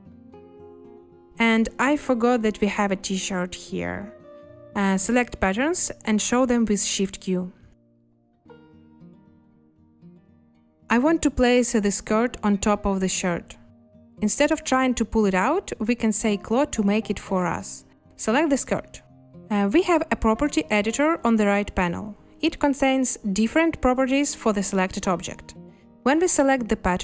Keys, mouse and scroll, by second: 0.5 2, 6.9 a, 10.1 shift+q, 14.2 space, 14.3 a.